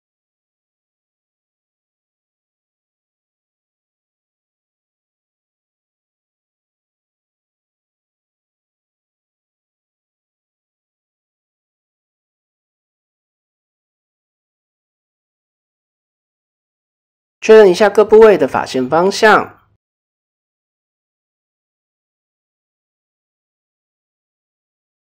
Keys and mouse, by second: 0.0 Tab, 0.8 click, 1.7-3.3 middle drag, 3.6 Tab, 4.1-4.5 middle drag, 5.3 s, 6.7-7.3 middle drag, 7.4 middle click, 8.1-9.2 middle drag, 9.9 alt+click, 10.3 s, 11.3 Tab, 11.4-11.8 middle drag, 12.0-12.6 middle drag, 13.0 KP_1, 14.3-14.7 shift+middle drag, 15.1 shift+middle drag, 16.5 shift+middle click, 17.6 click, 17.9 Tab, 18.2 a, 19.0 shift+n, 19.4 Tab, 20.0 Tab, 21.0 a, 22.0 shift+n, 22.4 Tab, 23.0-23.5 shift+middle drag.